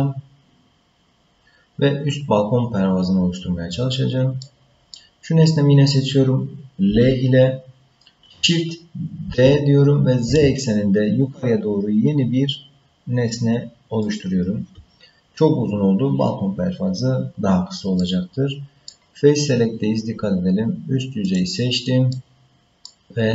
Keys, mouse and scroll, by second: 4.4 middle click, 6.9 l, 9.3 shift+d, 18.0 middle click, 21.2 click, 22.1 middle click.